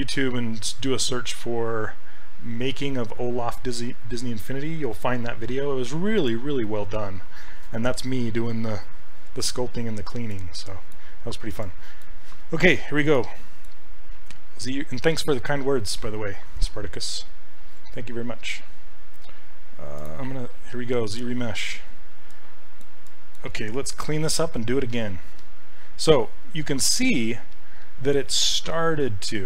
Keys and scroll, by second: 27.5 s.